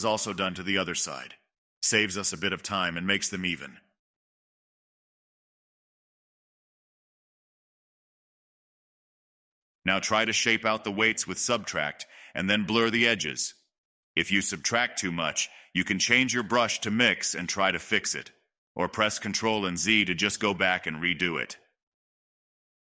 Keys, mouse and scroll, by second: 0.0 n, 0.1-1.8 middle drag, 1.8 click, 2.1 click, 2.4 click, 3.3 click, 4.5 click, 5.7-8.1 drag, 8.1 scroll up 1, 8.5 middle click, 8.8-9.3 scroll up 2, 9.3 click, 9.9 scroll down 1, 10.0 middle click, 10.5-11.5 drag, 11.5 middle click, 11.9-13.2 drag, 13.2 middle click, 13.7-15.0 drag, 15.0 middle click, 15.8 click, 16.8-18.3 middle drag, 18.3 click, 18.8-20.3 middle drag, 20.3 click, 20.5 middle click, 21.0-22.6 drag, 22.6 middle click.